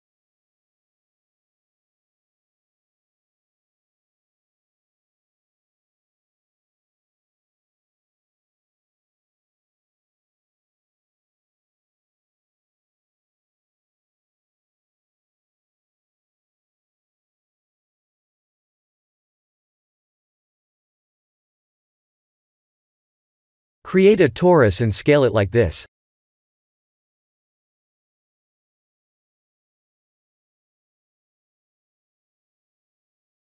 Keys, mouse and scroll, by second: 1.1 ctrl+z, 1.4 middle click, 5.2 click, 7.6 click, 9.1 middle click, 10.7 ctrl+z, 12.1 click, 12.7 middle click, 14.0-14.8 scroll down 8, 14.8 middle click, 15.3 click, 15.7 middle click, 16.4 Tab, 16.7 click, 17.1 scroll down 1, 18.2 KP_1, 20.5 scroll down 1, 21.2 scroll down 3, 21.3 shift+z, 24.8 shift+a, 28.3 click, 30.7 s.